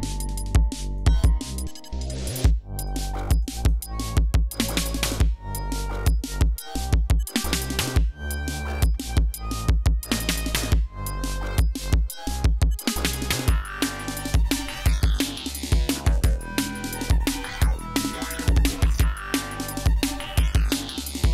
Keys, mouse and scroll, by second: 0.2 click, 0.9 click, 2.3 click, 3.3 click, 3.9 ctrl+scroll down 2, 4.5 ctrl+scroll up 2, 5.9-6.2 scroll down 2, 6.5 ctrl+scroll down 2, 7.0 ctrl+scroll up 2, 7.7 ctrl+scroll down 2, 8.2 ctrl+scroll up 2, 9.5-10.3 scroll down 4, 10.8-11.5 scroll down 4, 11.6 scroll up 2, 12.5 ctrl+scroll down 2, 12.8 ctrl+scroll up 2, 14.0-14.6 scroll down 4, 20.7-21.2 scroll up 2.